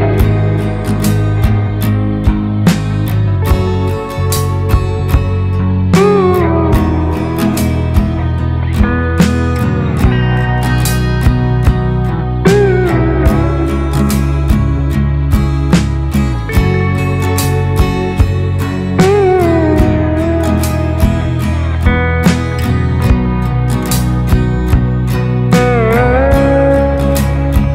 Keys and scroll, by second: 7.4-9.1 typing.